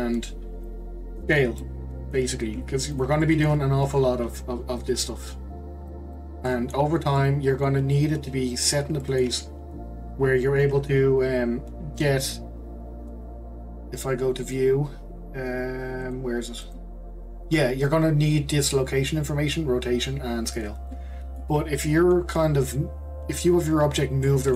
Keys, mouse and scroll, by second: 0.6 click, 1.6-2.6 middle drag, 2.6 s, 3.2-3.7 middle drag, 3.7-4.8 scroll down 2, 4.8-5.9 drag, 6.5-6.9 middle drag, 6.9 scroll down 2, 7.2-10.3 middle drag, 10.3-12.5 scroll up 1, 12.5-13.4 scroll up 1, 14.4 click, 16.0 click, 16.6 click, 20.9-21.6 middle drag, 21.6 scroll down 1, 21.8-24.5 middle drag.